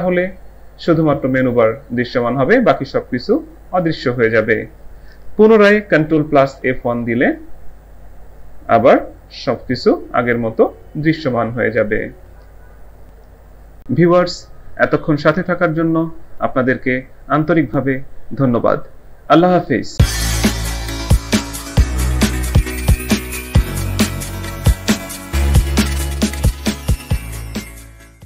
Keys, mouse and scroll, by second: 6.5 ctrl+F1.